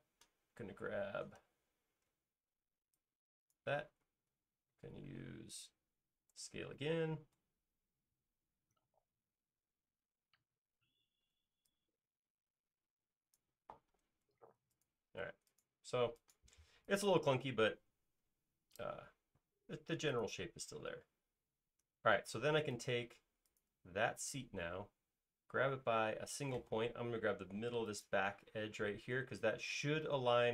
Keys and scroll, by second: 6.8 s, 13.9 alt+space, 16.1 space, 27.0 m.